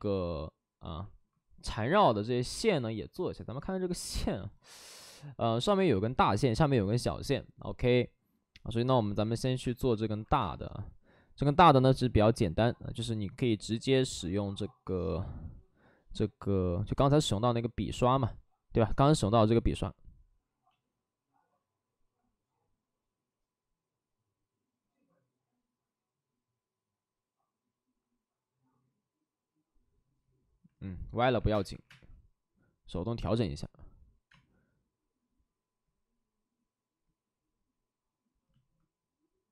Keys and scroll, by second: 9.5 x, 9.5 space, 14.6 space, 31.4 3, 31.4 space, 31.7 3, 34.2 space.